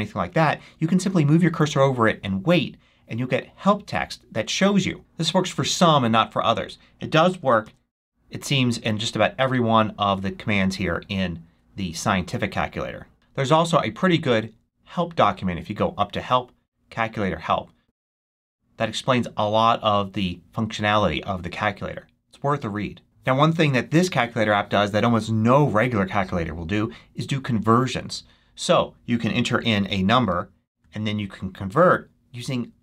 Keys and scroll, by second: 7.5 super+2, 29.8-30.7 typing.